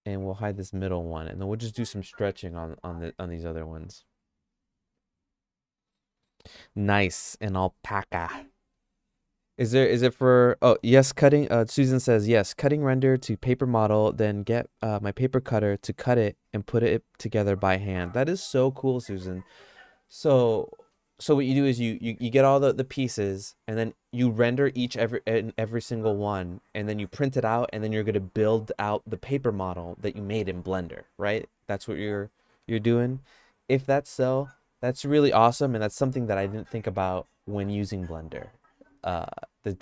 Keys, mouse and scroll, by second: 0.5 h, 3.2 middle click.